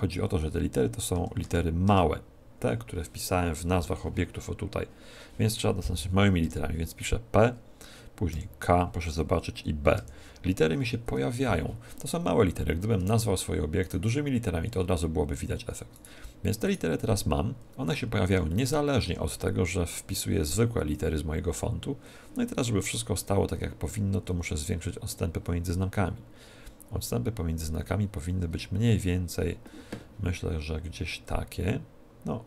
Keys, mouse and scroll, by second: 1.1 BackSpace, 1.4 BackSpace, 1.8 BackSpace, 6.3 p, 8.3 k, 10.1 b, 12.9 Tab, 13.7-15.7 right drag, 15.9-18.4 right drag, 18.4-20.3 middle drag, 22.8-25.1 middle drag, 25.1-27.0 drag.